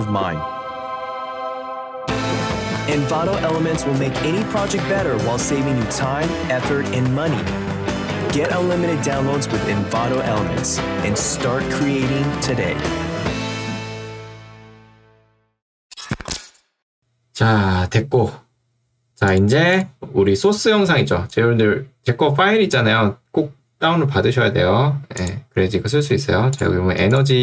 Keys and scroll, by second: 21.0 ctrl+2, 23.8 Escape.